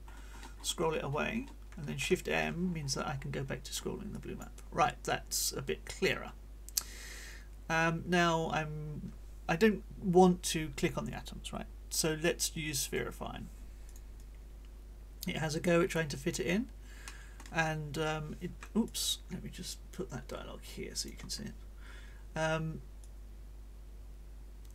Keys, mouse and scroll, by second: 0.0 shift+middle click, 0.2-1.6 scroll up 1, 1.8 shift+m, 2.4-3.4 shift+scroll up 7, 4.6-12.1 drag, 4.6-12.1 right drag, 12.8 click, 13.8 click, 15.0-16.5 drag, 17.0 middle click, 18.8-21.2 drag, 23.0-24.7 drag.